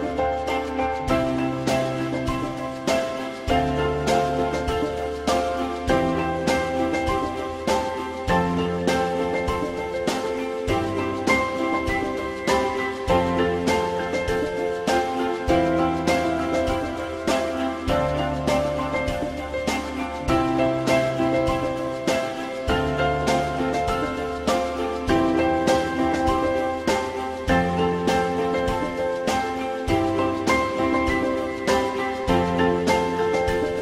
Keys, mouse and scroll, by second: 1.7-2.6 typing, 6.8 alt+middle click, 9.3 alt+scroll up 1, 10.6 F4, 11.1 alt+middle click, 16.9 f, 17.2 z, 21.2 F3, 21.7 F3, 24.6 shift+click, 28.8 F3, 31.0 alt+middle click, 32.5 F3.